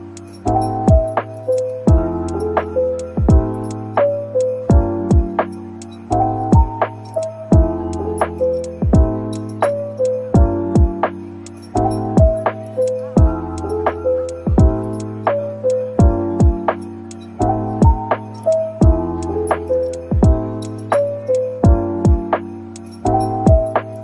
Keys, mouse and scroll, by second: 0.3 middle click, 0.8 Tab, 1.8-2.5 scroll down 1, 2.5 typing, 3.6 typing, 4.9 typing, 8.5 typing, 9.9 typing, 11.1 typing, 15.3 double click, 16.0 alt+click, 16.6-18.2 typing, 19.9 typing, 21.1 alt+click, 21.7 ctrl+b.